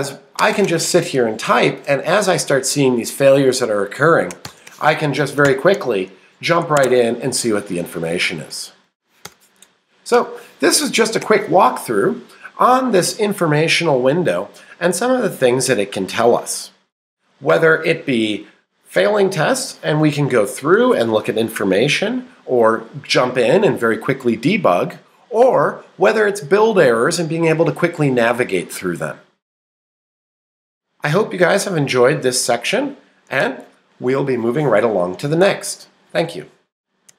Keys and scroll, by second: 6.8 Escape, 8.8 shift+Up.